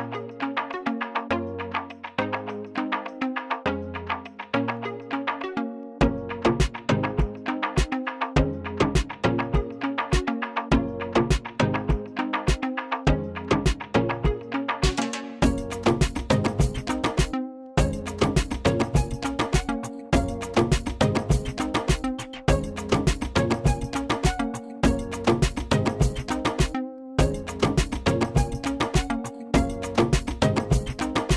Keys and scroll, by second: 2.6 Delete, 19.3 Delete.